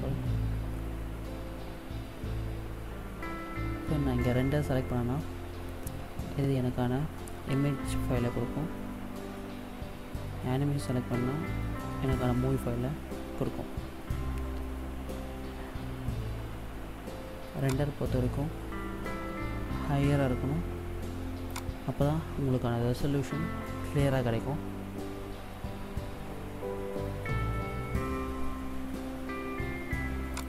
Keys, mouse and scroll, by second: 6.8-7.9 scroll down 4, 8.4-10.3 scroll up 10, 14.1-15.7 scroll down 11, 17.3 click, 20.0 KP_0, 27.1-27.4 scroll up 3, 27.9-29.1 scroll up 10, 30.1 click.